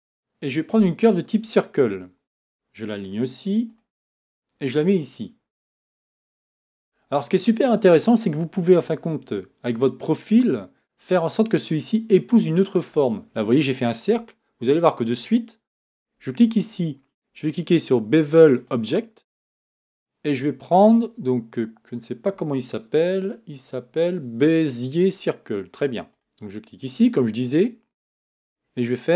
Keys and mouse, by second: 4.9-7.4 drag, 8.7-12.8 right drag, 23.4-29.1 right drag.